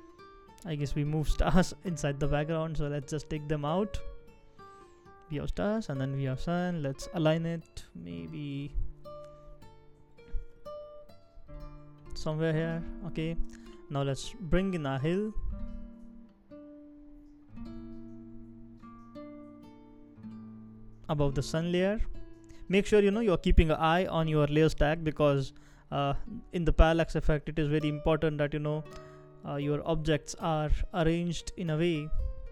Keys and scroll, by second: 6.8 shift+Down, 7.2 shift+Down, 7.3 shift+Down, 10.8 shift+Left, 11.3 shift+Left, 11.3 shift+Left, 12.1 shift+Down, 12.3 shift+Down, 12.5 shift+Down, 27.9 shift+Up, 28.1 shift+Up, 28.3 shift+Up, 31.2 shift+Down, 31.7 shift+Down, 31.8 shift+Down.